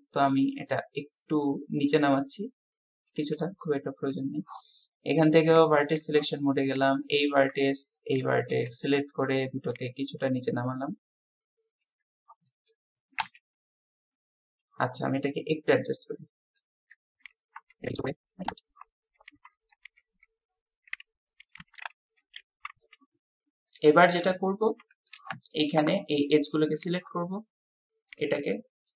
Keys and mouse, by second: 3.4 click, 7.1 click, 8.7 click, 9.7-11.9 drag, 12.5 click, 13.2 KP_1, 15.3-16.6 drag, 17.3 click, 18.3 click, 18.5 KP_1, 18.9 shift+click, 19.6 click, 20.9 s, 21.5 click, 21.8 s, 22.4 KP_7, 22.7 Tab, 23.7 Tab, 24.3 click, 24.4-24.7 middle drag, 24.9 shift+middle drag, 26.8 click, 28.5 middle click.